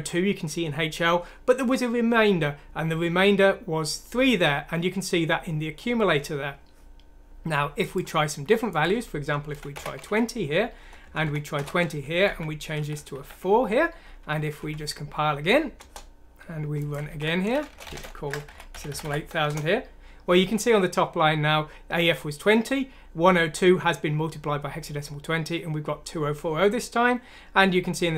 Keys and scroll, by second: 9.5-9.8 typing, 11.0-12.8 typing, 12.3 End, 14.6 F9, 17.0-19.0 typing, 19.5 Return.